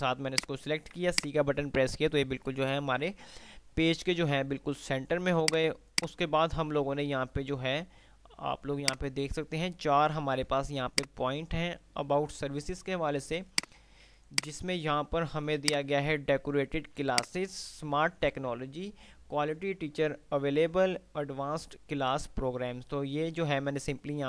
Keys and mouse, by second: 1.0 typing, 1.3 click, 1.6 F3, 5.5-8.0 drag, 8.8-10.3 click, 10.6 F2, 13.6 click, 14.5 shift+click, 15.0 c, 15.6-23.3 drag.